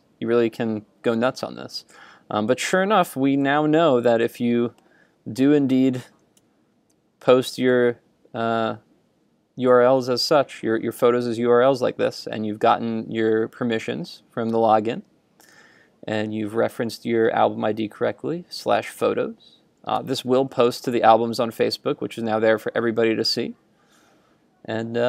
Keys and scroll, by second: 2.5 super+Tab, 6.4 super+Tab, 20.1 super+Tab.